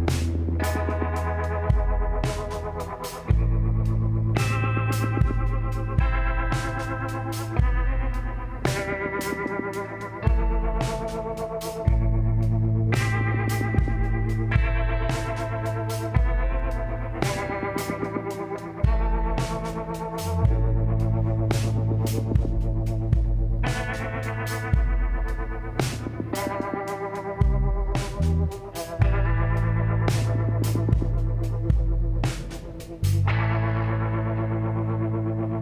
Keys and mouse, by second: 1.5 l, 2.7 e, 6.3-7.7 drag, 7.7-9.5 middle drag, 9.9 KP_8, 11.2 KP_7, 12.4-14.2 drag, 14.3 s, 20.0-21.2 middle drag, 21.2-22.9 drag, 21.6 l, 22.9 ctrl+n, 28.1-30.7 drag, 29.7-31.5 middle drag, 31.5-33.0 drag, 31.9 ctrl+z, 33.0-34.6 middle drag.